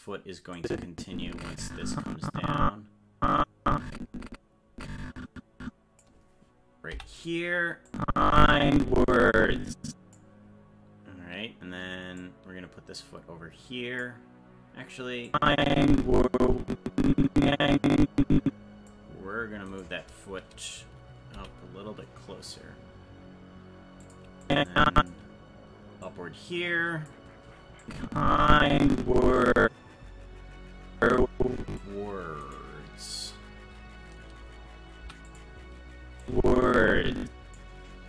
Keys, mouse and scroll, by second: 0.6-6.0 drag, 7.9-10.2 drag, 12.2-14.0 drag, 15.3-18.9 drag, 19.7 right click, 21.3 g, 24.5 click, 24.7 click, 26.0-27.1 drag, 27.8-31.8 drag, 32.6 right click, 35.0 i, 36.2-37.6 drag.